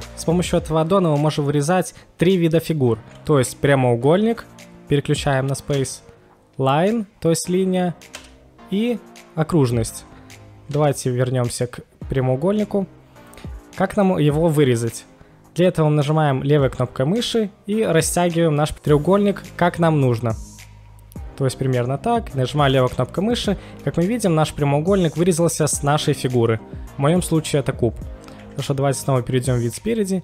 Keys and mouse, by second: 23.3-23.9 middle drag, 28.4 KP_1.